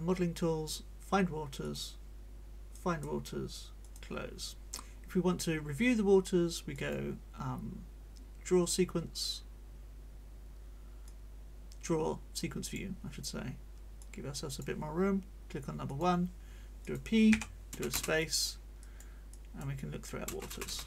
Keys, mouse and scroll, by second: 1.6 click, 2.7 click, 3.8 click, 6.7 click, 11.0-12.9 drag, 14.0 click, 15.9 click, 16.8 click, 17.3 p, 18.2 click, 18.2 space, 18.5 scroll up 1, 18.5 click, 18.8 click, 19.3-19.7 scroll up 1, 19.7 click, 19.7 middle click, 20.3 space.